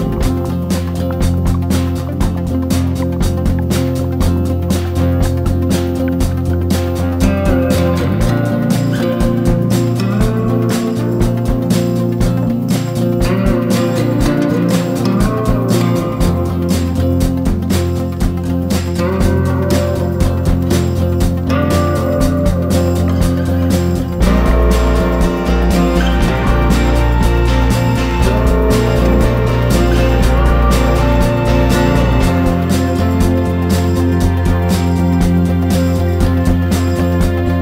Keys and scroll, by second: 0.4 ctrl+-, 1.3 BackSpace, 1.6 m, 2.0 l, 3.0 ctrl+=, 10.7 BackSpace, 10.8 ctrl+-, 12.1 ctrl+=, 21.8 ctrl+-, 22.7 BackSpace, 22.8 ctrl+-, 23.4 ctrl+f, 23.6 ctrl+d, 23.7 ctrl+s, 23.9 ctrl+=, 24.5 i, 29.8 ctrl+=, 31.9 ctrl+=.